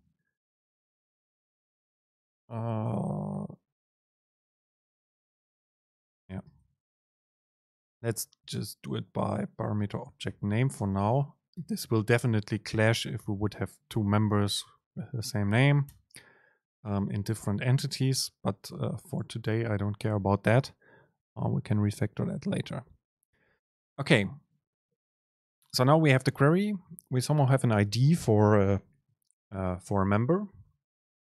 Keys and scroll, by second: 7.3 BackSpace, 7.7 super+space, 9.0 BackSpace, 10.9 super+space, 18.2 Down, 19.2 Down.